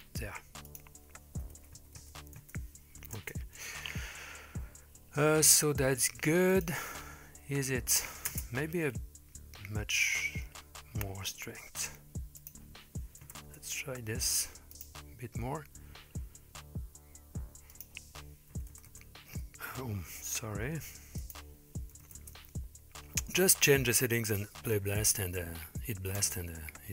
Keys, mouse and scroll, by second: 0.7-2.4 drag, 2.0 KP_0, 3.2 space, 6.5 click, 8.3 space, 9.5-11.4 scroll up 3, 12.4-13.5 drag, 14.7-15.6 drag, 17.8-19.5 drag, 19.0 KP_0, 21.3-22.4 drag, 23.9 click, 26.2 space.